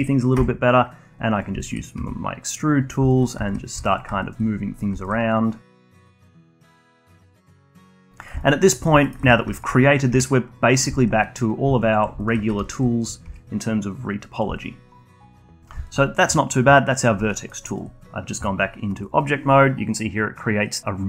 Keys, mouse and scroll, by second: 0.3 e, 1.6 alt+click, 1.9 e, 3.0 alt+click, 3.7 1, 3.9 click, 4.2-5.9 alt+drag, 5.9 2, 6.5 click, 6.7 alt+click, 7.4 e, 8.4 alt+click, 9.0 alt+middle click, 9.5-10.1 alt+drag, 10.1 2, 10.7 drag, 10.9-11.9 alt+drag, 12.2-13.2 alt+drag, 13.2 e, 14.5-15.4 alt+drag, 15.4 Tab, 15.8-17.3 alt+drag, 17.3-17.7 alt+middle drag, 17.7-20.7 alt+drag.